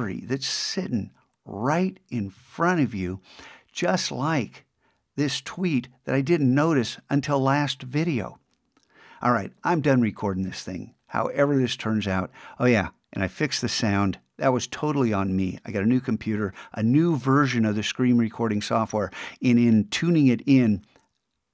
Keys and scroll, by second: 2.4 super+Tab.